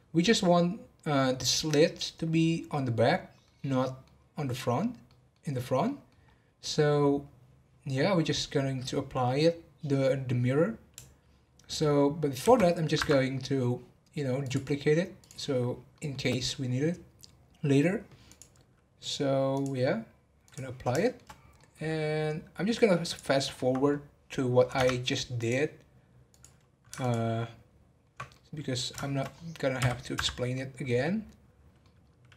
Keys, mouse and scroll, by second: 2.3 scroll down 3, 2.8-6.2 middle drag, 6.2-7.0 scroll up 1, 7.0-7.9 scroll up 1, 7.9 scroll down 1, 12.4 shift+d, 14.4 click, 15.1 click, 15.9-16.5 middle drag, 16.5-17.9 scroll up 1, 17.9 scroll up 2, 18.2 click, 19.5-21.0 drag, 21.0 shift+middle drag, 21.3 scroll down 1, 21.5-22.3 middle drag, 22.3-23.0 scroll down 1, 23.0 click, 23.5 scroll up 3, 23.9 scroll down 1, 24.7 Tab, 25.4-26.4 drag, 26.9 ctrl+click, 28.3-29.3 middle drag, 29.3 scroll up 1, 29.7 v, 30.5-32.3 middle drag.